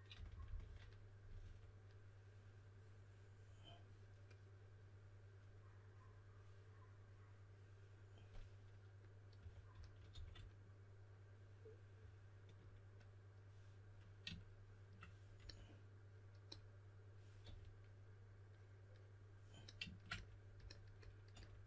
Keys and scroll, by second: 0.1-1.4 typing, 9.1-10.6 typing, 17.4 4.